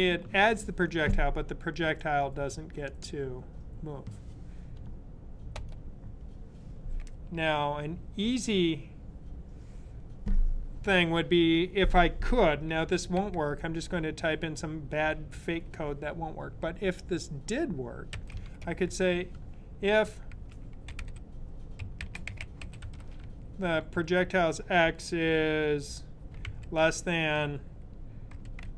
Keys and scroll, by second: 18.0-23.9 typing, 26.3 typing, 27.9-28.7 typing.